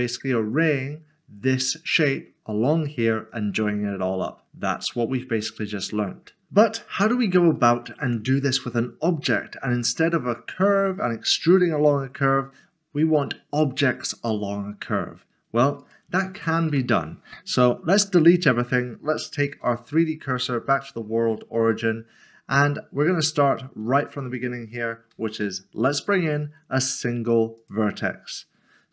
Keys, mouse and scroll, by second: 5.4 middle click, 7.5 middle click, 15.8 middle click, 16.7 typing, 19.5 typing, 20.3 click, 21.0 scroll up 1, 21.7 middle click, 23.1 shift+middle click, 25.4 typing, 27.6 click.